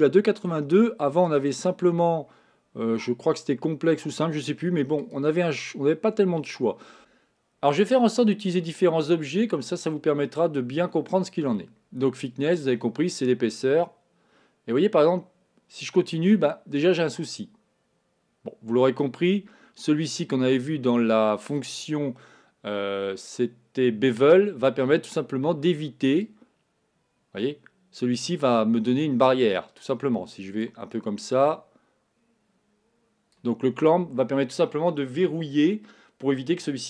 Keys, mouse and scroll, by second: 1.3-7.0 drag, 12.5-15.4 drag, 20.2-36.8 drag.